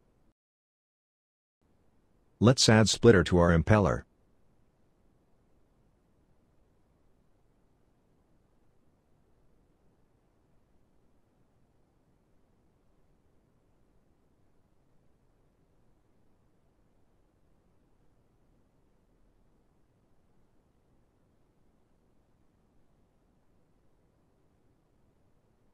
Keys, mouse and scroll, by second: 21.3 middle click.